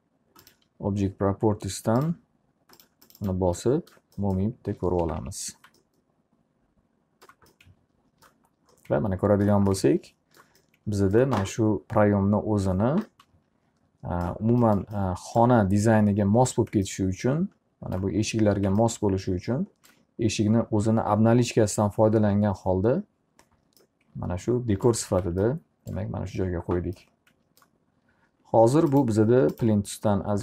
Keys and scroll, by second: 5.1 F4.